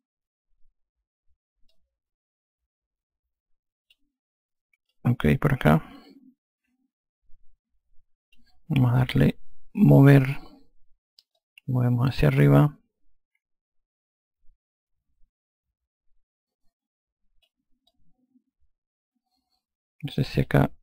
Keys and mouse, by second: 2.0 click, 5.2 alt+click, 10.2 e, 11.6 click, 18.2 alt+click.